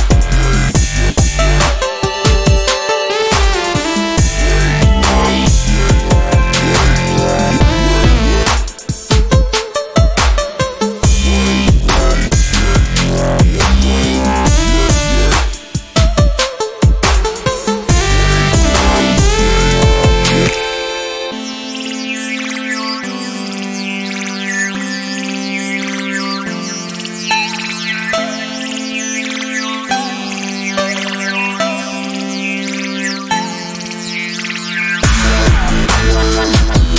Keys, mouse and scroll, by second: 8.5 click, 9.8 ctrl+scroll up 1, 10.6-12.6 shift+drag, 12.6 ctrl+g, 13.2 shift+click, 15.7 ctrl+scroll down 1, 16.3 click, 16.9 ctrl+d, 17.1 click, 18.0 ctrl+shift+g, 19.2 click, 21.1 Delete, 21.4 click, 21.6 Delete, 22.8-26.3 drag, 26.3 ctrl+scroll up 1, 27.6 ctrl+shift+click, 28.8 ctrl+z, 29.4 click, 34.2 ctrl+d, 34.8-36.9 alt+drag.